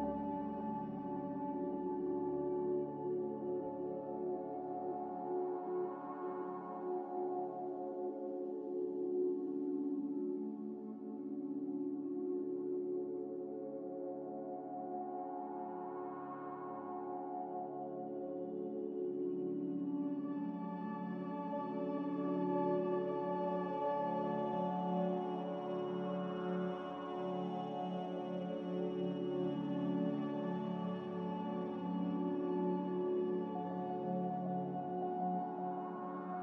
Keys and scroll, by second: 5.0-5.8 typing, 9.8-10.7 typing, 12.3-13.1 typing, 24.5 g, 29.8 z, 32.3 a, 34.5 z.